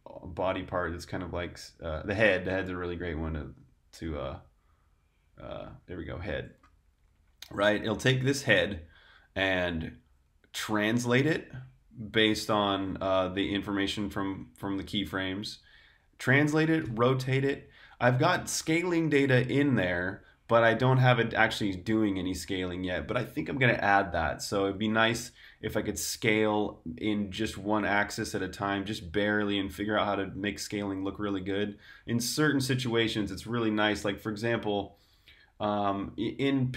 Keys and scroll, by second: 8.0 8.